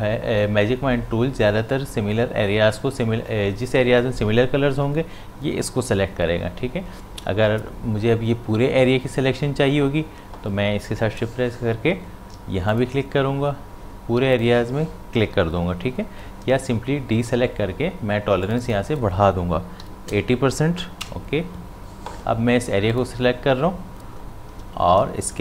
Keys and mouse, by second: 12.3 shift+Num_Lock, 12.7 shift+click, 17.3 ctrl+d, 18.5 click, 22.9 click.